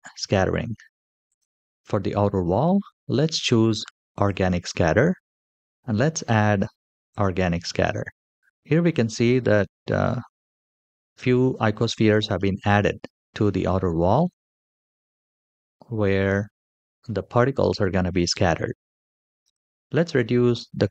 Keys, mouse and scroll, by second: 1.0 click, 3.9 click, 6.9 click, 9.0-9.6 scroll up 4, 12.7-13.2 scroll down 2, 13.5 shift+middle click, 15.1-16.7 middle drag, 16.8-17.4 shift+middle drag, 17.7-19.8 scroll down 1, 19.8-20.9 drag.